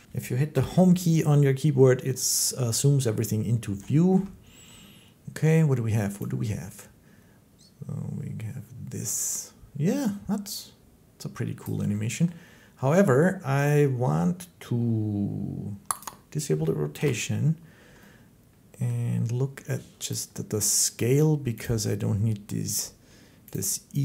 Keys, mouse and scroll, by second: 0.3 Home, 2.9 middle click, 4.0 shift+middle click, 11.4 click, 12.1 middle click, 15.8 click, 16.8 Home, 17.1 Page_Up, 18.7-19.9 scroll, 19.9 click, 21.5 click, 23.4 click.